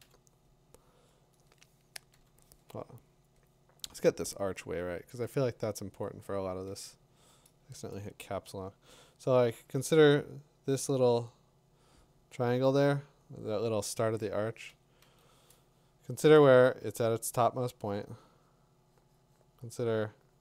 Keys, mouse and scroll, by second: 0.0 b, 2.1 b, 5.9 click, 11.0 click, 12.7 click, 14.7-15.0 typing, 16.6 b.